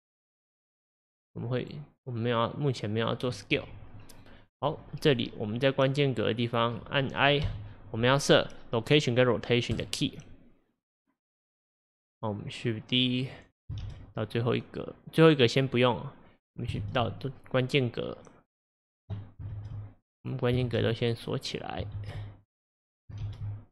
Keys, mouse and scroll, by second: 0.8 click, 3.2-7.0 drag, 12.1-13.9 drag, 13.9 shift+d, 16.9 shift+d, 20.7 shift+d, 22.0 shift+d.